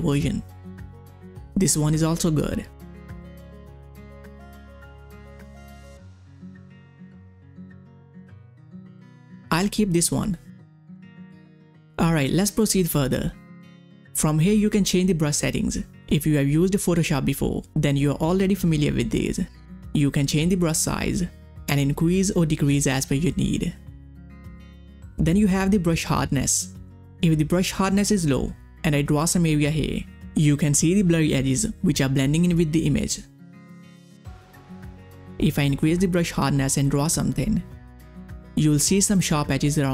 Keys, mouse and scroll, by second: 3.0 click, 11.1 click, 11.1 click, 15.7 click, 20.0 click, 20.0-24.6 drag, 27.1 click, 27.1-39.9 drag.